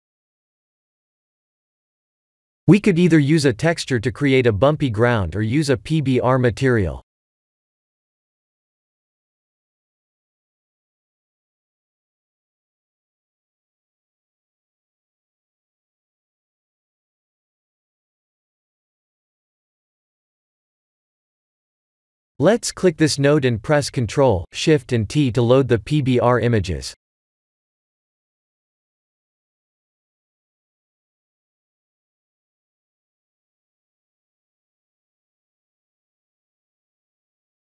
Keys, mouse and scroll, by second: 1.0 click, 1.8 click, 8.4 click, 15.0 click, 15.4 click, 18.9 click, 21.1 shift+middle click, 22.7 click, 23.7 ctrl+shift+t, 26.2 click, 26.8 shift+click, 27.2 click, 28.0 click, 29.3 click, 32.0-33.1 scroll down 7, 33.1 middle click, 33.1 scroll down 1, 35.2 click, 36.0 middle click.